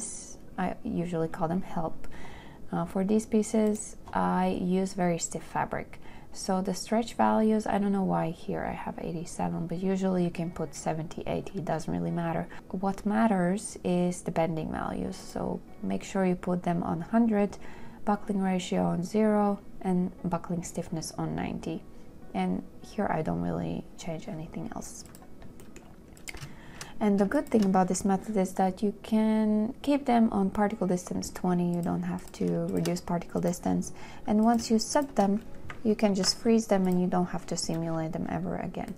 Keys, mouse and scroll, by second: 27.7 shift+click, 33.0 shift+click, 35.2 shift+click, 36.4 ctrl+k.